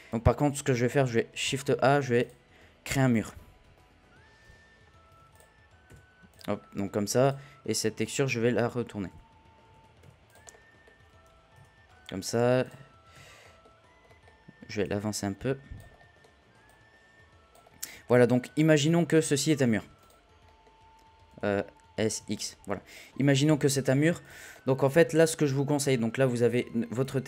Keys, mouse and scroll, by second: 0.1-0.9 scroll up 2, 0.9 shift+a, 3.2 scroll down 1, 3.4 KP_1, 4.4 r, 6.5 scroll down 1, 6.6-7.2 middle drag, 7.2 click, 7.8 KP_1, 9.1 r, 10.5-11.5 middle drag, 11.5 z, 11.8-12.4 scroll down 2, 12.4 scroll down 1, 12.5 scroll up 2, 12.6 click, 13.1 z, 13.4-14.8 middle drag, 14.8 click, 15.9 middle drag, 16.2-16.6 scroll up 1, 16.6 click, 17.9-18.7 middle drag, 18.7 click, 20.4 middle drag, 20.7-21.4 scroll down 1, 21.4 ctrl+z, 23.5 scroll down 1, 23.8-24.2 shift+middle drag, 24.2 click, 24.5 middle click, 24.9 scroll up 1, 25.2-27.1 drag, 27.2 scroll up 1.